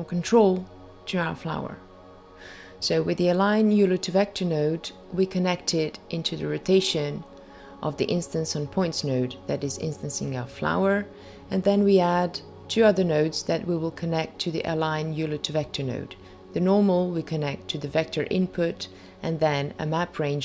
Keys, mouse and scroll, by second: 2.4 click, 3.2 shift+a, 11.6 click, 16.0 click, 16.9 shift+a.